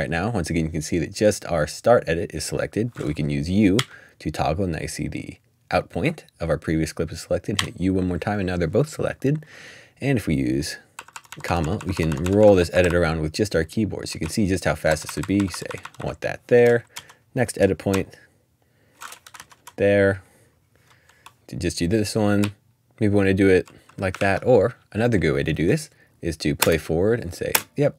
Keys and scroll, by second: 3.7 typing, 7.5-9.0 typing, 10.9-16.3 typing, 17.7-19.4 typing, 21.1-25.0 typing, 27.5 typing.